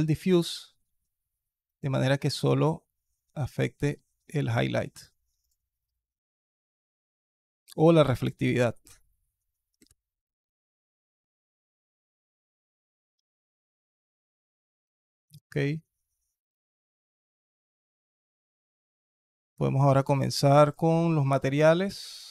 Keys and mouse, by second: 0.3 click, 1.5 click, 8.5-9.7 drag, 13.0-13.6 alt+drag, 14.1-14.7 alt+drag, 15.2-16.3 alt+drag, 16.9-18.5 alt+drag, 19.9 click.